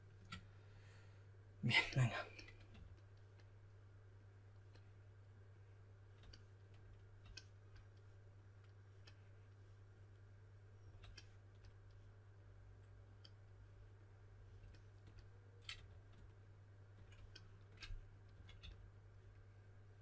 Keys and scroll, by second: 2.7 4, 15.7 4, 18.0-19.0 typing.